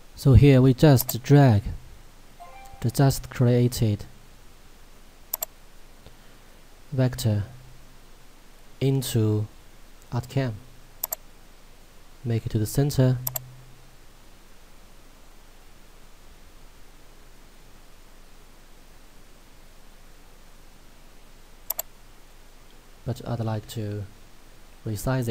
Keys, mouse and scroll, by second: 6.5-9.6 scroll down 1, 11.1 click, 21.7 click.